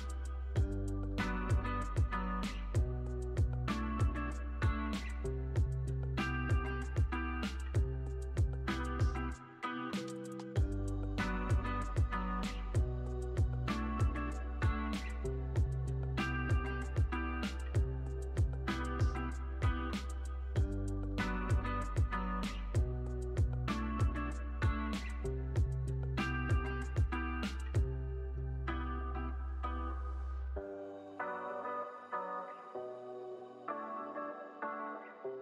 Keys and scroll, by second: 2.8 super+z, 4.0 z, 4.5 x, 6.6-7.6 typing, 8.7-11.4 typing, 14.6 1, 15.0 0, 15.2 Return, 16.9-17.9 typing, 19.9 x, 21.3 z, 23.0 x, 26.7-31.5 typing.